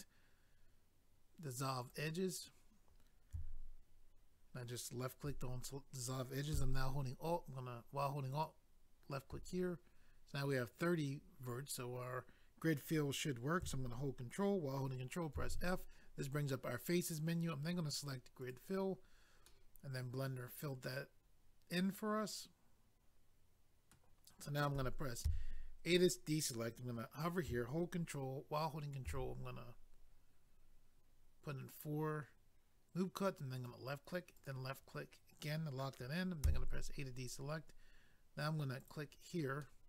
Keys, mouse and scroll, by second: 1.8 click, 8.3 alt+click, 18.4 click, 18.5 click, 19.5 middle click, 25.2 a, 29.1 ctrl+r, 29.8-30.5 scroll up 1, 31.9 scroll up 1, 33.6 click, 33.7 click, 34.4 click, 34.4 click, 36.4 a, 38.8 click, 38.9 click, 39.6 middle click.